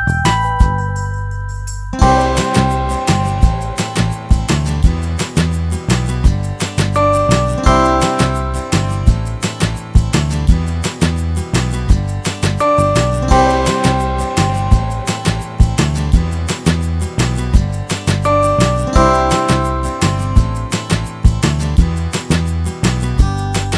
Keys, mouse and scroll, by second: 1.7 a, 9.2-11.2 drag, 16.9 s.